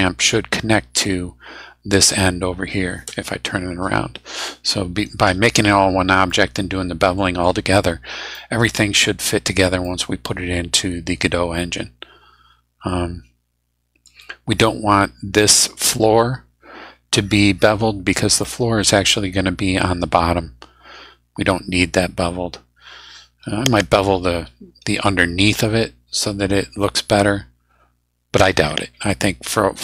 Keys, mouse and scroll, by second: 6.3-7.6 middle drag, 8.3 middle click, 9.8-14.2 drag, 18.4 click.